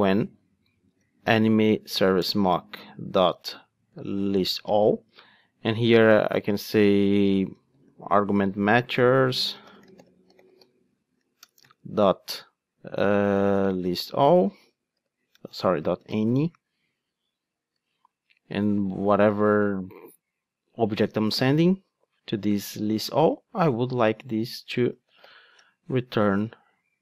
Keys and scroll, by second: 11.6 Return, 17.8 Return, 25.7 Return.